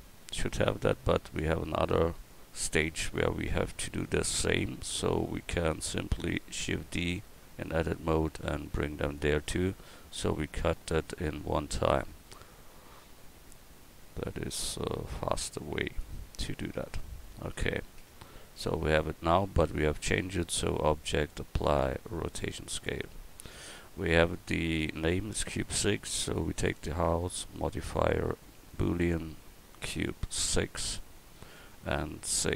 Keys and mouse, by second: 6.6 shift+d, 10.1-12.9 drag, 12.9 KP_1, 16.4-20.5 drag.